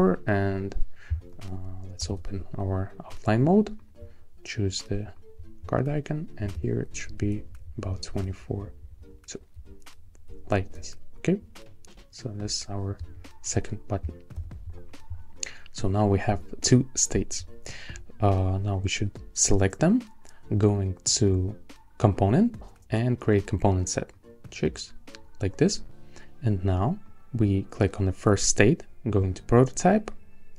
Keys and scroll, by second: 2.0 shift+o, 6.7 alt+Left, 14.3 shift+o.